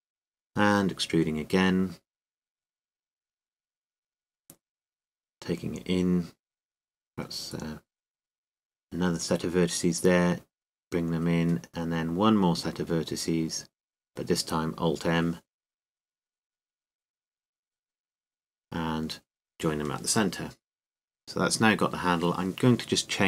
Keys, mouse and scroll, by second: 0.6 click, 2.0 t, 3.0 e, 3.4-6.1 drag, 6.1 s, 7.7-9.3 drag, 9.3 e, 9.7-12.5 drag, 11.4 s, 12.6 click, 13.6-15.8 middle drag, 15.4 e, 15.8-18.5 drag, 19.5 alt+m, 21.1 click, 21.5 Tab, 22.6 Tab.